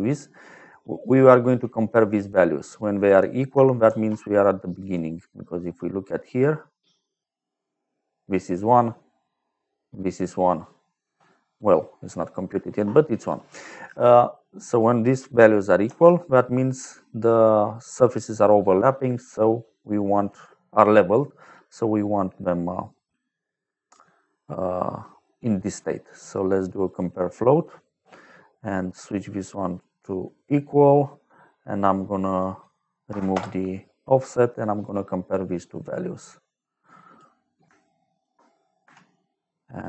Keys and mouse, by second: 0.9 click, 1.9 click, 2.9 click, 3.8 shift+a, 4.7 click, 11.4 middle click, 14.6 click, 15.8 shift+a, 26.0 click, 26.8 click, 29.0 click, 30.2 click, 32.2 click, 33.0 KP_0, 33.2 Return, 34.4 middle click, 35.6 click, 38.0 shift+click, 38.7 f, 39.6 click.